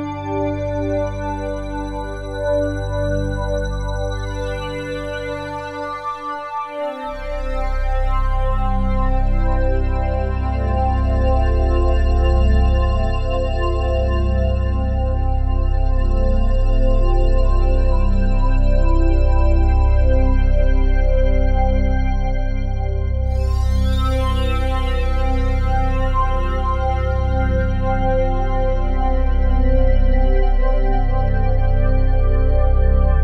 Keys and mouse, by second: 8.9 ctrl+s, 9.8-14.8 drag, 14.8 KP_Divide, 15.8 ctrl+s, 16.3-18.9 ctrl+alt+drag, 19.3 click, 20.2 click, 21.6 1, 22.2 g, 27.1 click, 28.2-28.6 typing, 29.6 click, 30.5-31.0 typing.